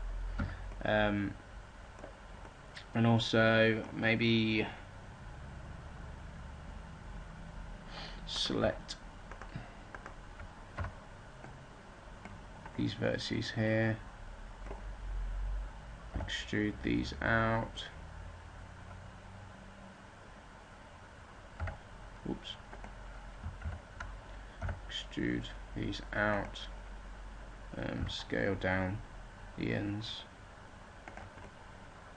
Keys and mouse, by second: 0.3 a, 5.3-8.3 middle drag, 8.3-12.2 drag, 10.7 b, 16.0 e, 23.5 ctrl+z, 24.5 e, 29.3 s.